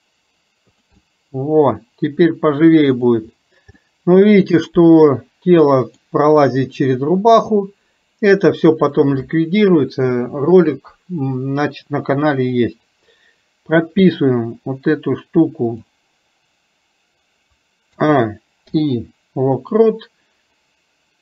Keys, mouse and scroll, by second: 1.1-3.1 middle drag, 3.8-6.2 middle drag, 9.0-12.7 middle drag.